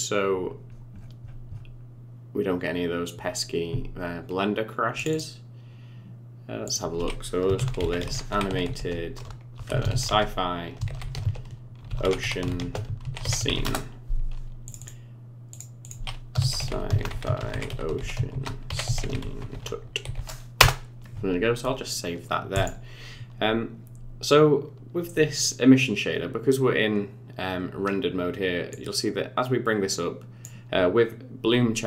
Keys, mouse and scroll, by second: 25.4 middle click, 28.7 click.